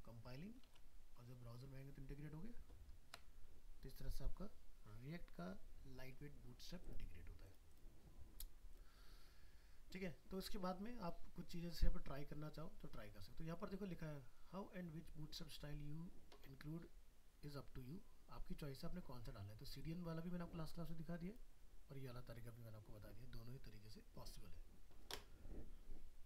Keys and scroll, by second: 0.7 alt+Tab.